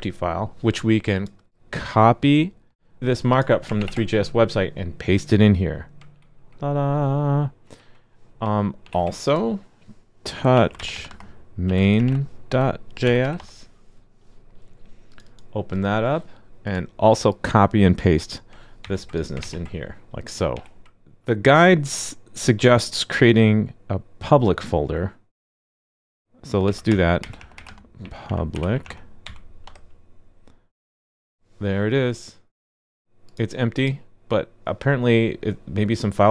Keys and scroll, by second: 3.8 super+v, 6.1 super+b, 8.8 super+b, 18.8 super+c, 19.4 super+v, 20.5 super+s.